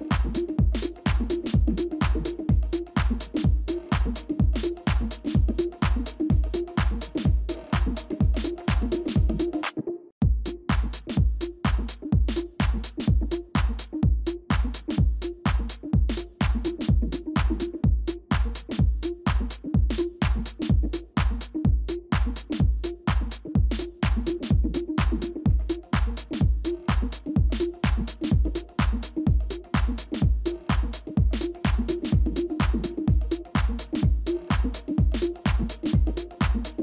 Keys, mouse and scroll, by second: 1.4-2.0 scroll down 1, 2.5 ctrl+-, 2.6 ctrl+-, 2.8 ctrl+-, 3.8 ctrl+d, 4.1 ctrl+d, 4.4 ctrl+d, 4.7 ctrl+d, 8.4 ctrl++, 8.7 ctrl++, 13.7 right click, 21.2 ctrl+g, 24.1 ctrl+g, 27.5 right click.